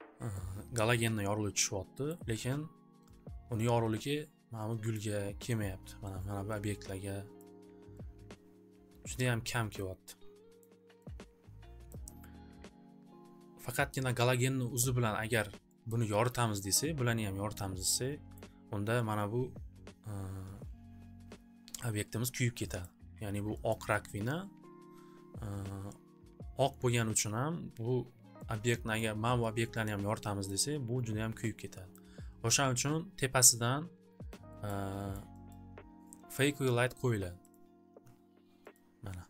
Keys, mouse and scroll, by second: 2.0 click, 5.1 click, 7.4 click, 9.1 click, 10.6 click, 11.8 click, 15.3 click, 15.8 click, 17.5 click, 18.4 click, 22.8 click, 23.7 click, 29.0 click, 30.4 click, 31.9 click, 34.3 click, 34.6 click, 35.2 click, 35.6 click, 37.5 click, 38.7 click.